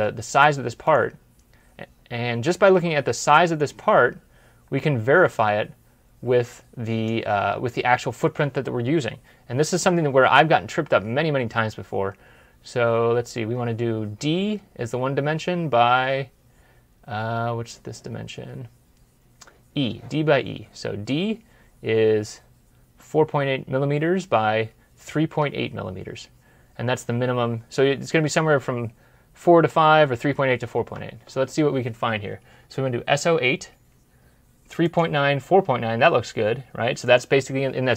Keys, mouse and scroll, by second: 12.4 scroll down 1, 12.8 scroll up 1, 30.6 scroll up 1, 30.7 alt+Tab.